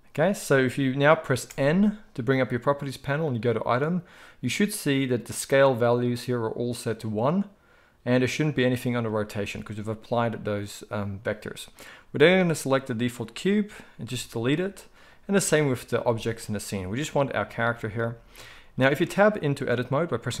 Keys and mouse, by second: 0.1 click, 0.2-3.3 middle drag, 1.4 n, 3.3 click, 3.4-11.7 middle drag, 11.7 click, 11.8-15.1 middle drag, 14.0 x, 15.1-17.1 drag, 16.1 x, 17.1-20.4 middle drag.